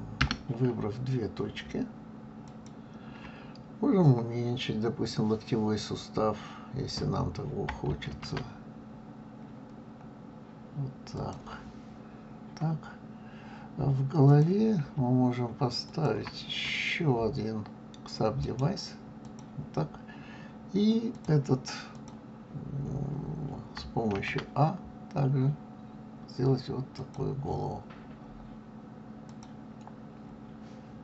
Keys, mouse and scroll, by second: 2.4 shift+click, 8.1 ctrl+a, 12.4-13.0 scroll up 1, 14.2 click, 15.8 shift+click, 18.4-21.1 right drag, 21.1 click, 21.9 click, 24.1 ctrl+a, 29.2 click.